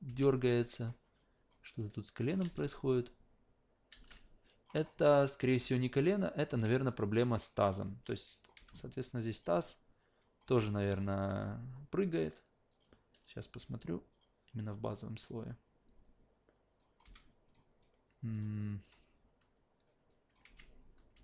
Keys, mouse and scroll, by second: 0.1 alt+v, 0.2 alt+drag, 0.5 alt+right click, 0.9 alt+middle drag, 1.2 alt+drag, 2.3 click, 2.4 alt+v, 3.9 alt+v, 4.4 click, 4.9 alt+middle click, 5.2 alt+right click, 5.4 alt+click, 5.6 alt+v, 6.5 alt+v, 6.9 click, 7.4 alt+middle drag, 8.2 drag, 8.5 f, 9.3 click, 10.0 click, 10.5 f, 10.9 click, 11.4 alt+middle click, 12.7 click, 14.1 click, 15.2 click, 16.8 click, 17.0 f, 17.5 click, 18.3 click, 18.8 a, 20.1 alt+drag, 20.4 alt+v, 21.1 alt+v.